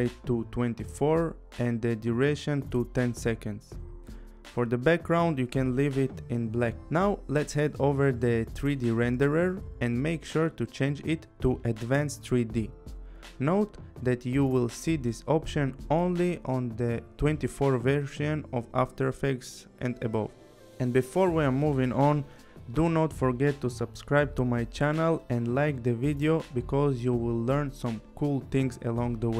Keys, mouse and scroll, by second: 0.0-1.7 typing, 1.1 click, 2.5 click, 5.3 click, 6.8 click, 8.2 click, 17.9 click, 22.1 click.